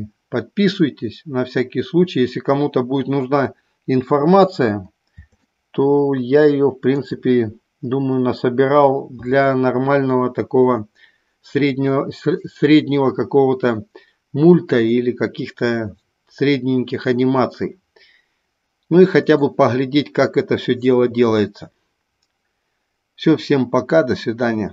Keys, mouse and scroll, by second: 6.1-7.8 middle drag.